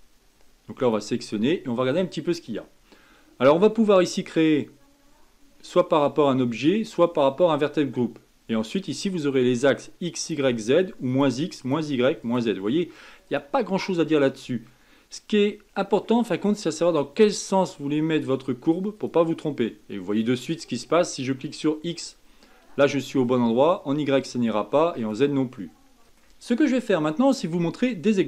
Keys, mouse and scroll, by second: 0.8 click, 1.9-3.2 scroll down 3, 9.1 click, 10.2 click, 11.1 click, 11.6 click, 12.2 click, 13.3 click, 13.7 scroll down 4, 14.2-17.2 middle drag, 18.1 click, 19.0 click, 20.1 click, 20.7 click, 22.4 middle click, 23.3 scroll up 1, 24.1 click, 25.0 click, 26.0-27.1 middle drag, 27.1-27.6 scroll down 1, 27.6-28.1 scroll up 1.